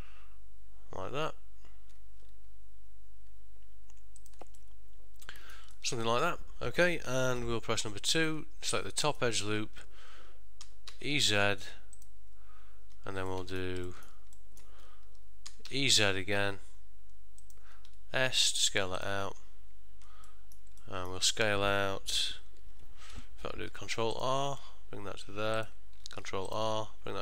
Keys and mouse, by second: 4.7 middle click, 5.9 ctrl+middle click, 6.2 shift+middle click, 7.5 2, 8.3 alt+click, 8.9 middle click, 10.7 e, 13.4 ctrl+middle click, 14.2 ctrl+shift+middle click, 14.4 shift+middle click, 15.6 e, 20.4 middle click, 20.7 middle click, 20.9 ctrl+middle click, 23.8 ctrl+r, 26.2 ctrl+r.